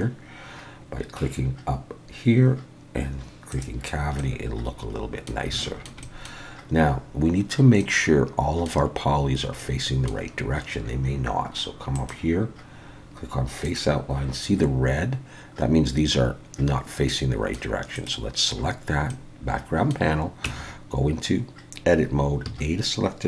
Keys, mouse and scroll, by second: 4.2 middle click, 5.6 shift+middle click, 6.0 middle click, 7.5-7.8 scroll down 1, 7.8 middle click, 9.6 middle click, 11.9 click, 17.1 middle click, 18.0 click, 19.1 middle click, 20.5 Tab, 22.4 a.